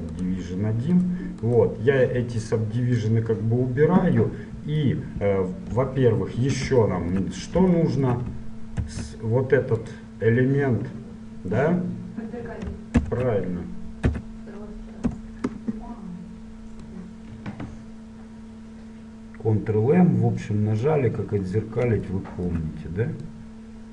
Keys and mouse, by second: 0.3 right click, 1.7-3.7 right drag, 3.1-4.9 drag, 4.3 middle click, 5.9 KP_1, 8.9 shift+d, 13.1 ctrl+m, 17.1-18.9 drag, 21.4-23.3 middle drag, 23.3-23.9 drag.